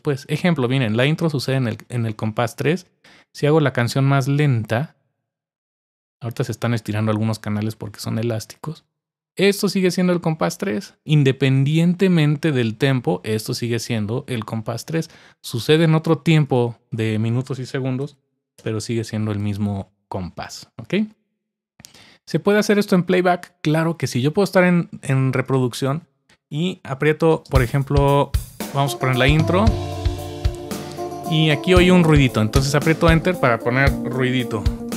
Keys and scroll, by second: 17.9-18.8 typing, 27.3 typing, 32.5 typing, 33.8-34.9 typing.